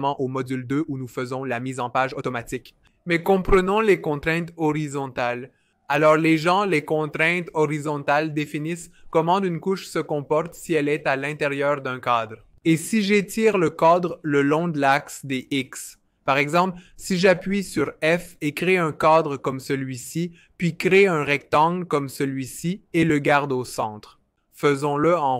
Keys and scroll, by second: 2.1 n, 17.1-17.9 typing, 20.6 r, 23.1 alt+v, 23.4 alt+h, 24.5-25.3 typing.